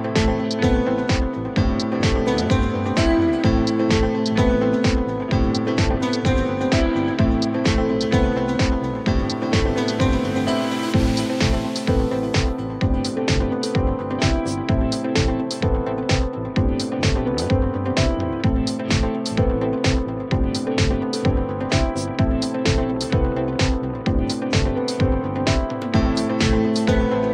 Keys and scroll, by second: 3.4 2, 4.1 ctrl+t, 4.4 2, 4.7 F4, 7.0 ctrl+BackSpace, 8.6 ctrl+BackSpace, 12.4 ctrl+BackSpace, 12.9 F4, 14.0 F4, 15.1 1, 17.0 2, 19.6 ctrl+BackSpace, 21.5 ctrl+BackSpace, 22.0 F4, 22.7-23.5 typing, 25.6 alt+q, 26.2 alt+x.